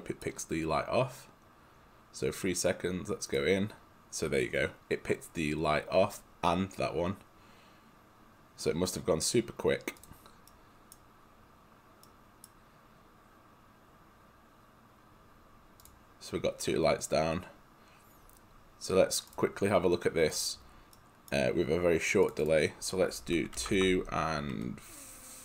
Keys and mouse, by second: 3.4 click, 10.1 click, 10.6 right click, 17.1 click, 20.4 click, 21.0 right click, 22.3 click, 23.6 2, 23.7 Tab.